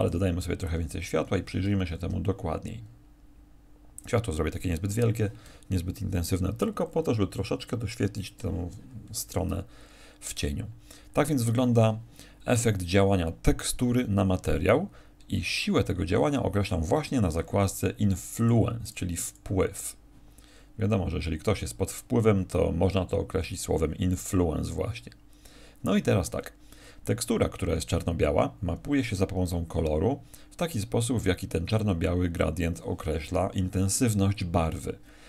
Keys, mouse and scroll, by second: 0.0 click, 0.6 click.